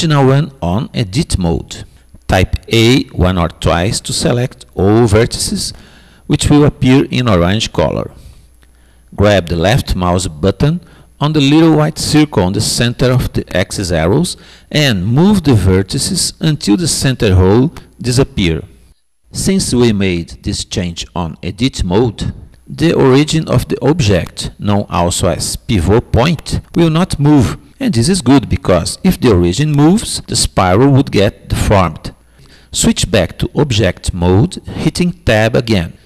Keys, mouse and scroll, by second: 4.1-6.0 middle drag, 6.5 a, 7.2 a, 14.6-16.6 drag, 32.9 Tab.